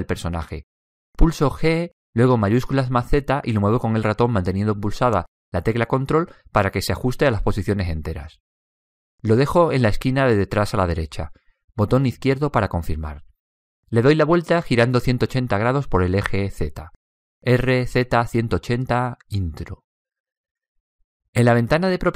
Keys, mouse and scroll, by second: 0.0 click, 2.1 middle click, 2.5 g, 17.6 r.